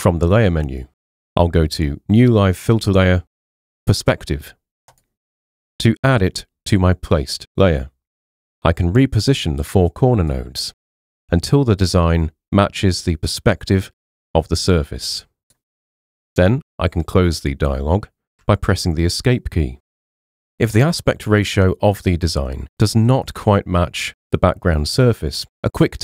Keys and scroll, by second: 18.3 Escape.